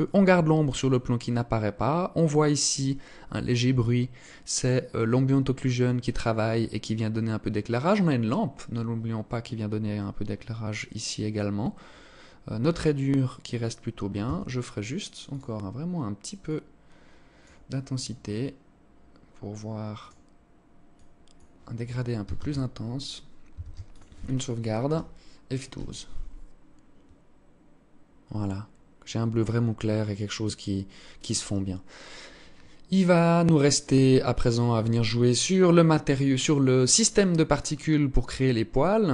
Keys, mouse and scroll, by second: 13.7 Escape, 14.8 click, 19.5 click, 23.1 ctrl+s.